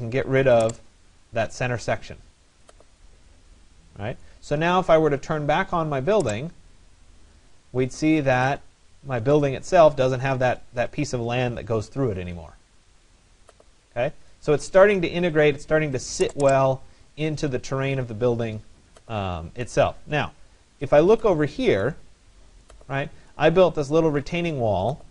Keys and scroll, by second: 0.5 Return, 14.9 Escape, 19.4 Escape.